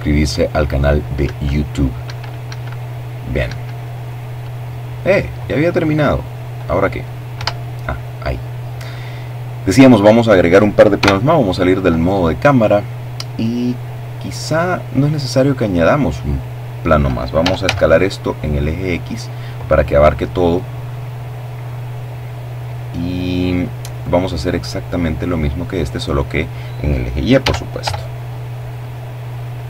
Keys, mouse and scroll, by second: 1.1 Escape, 5.0 Escape, 8.6 KP_0, 9.5-12.8 middle drag, 13.2 middle click, 15.0 s, 15.3 x, 16.8 click, 17.8-18.8 middle drag, 18.8-21.5 drag, 21.5 right click, 22.3 middle click, 23.3-24.5 drag, 25.0 s, 25.4 y, 26.8-27.8 drag, 27.3 right click, 28.7-29.6 drag.